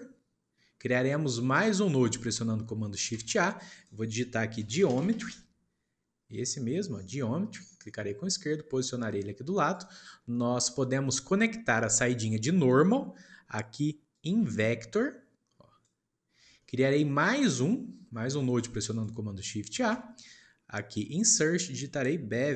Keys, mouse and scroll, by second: 1.2-2.6 shift+middle drag, 3.1 shift+a, 10.2-13.3 shift+middle drag, 14.1 click, 16.5-17.3 shift+middle drag, 17.3 scroll down 2, 18.0-18.4 scroll down 1, 18.4-18.8 shift+middle drag, 18.8 shift+click, 19.7 shift+a.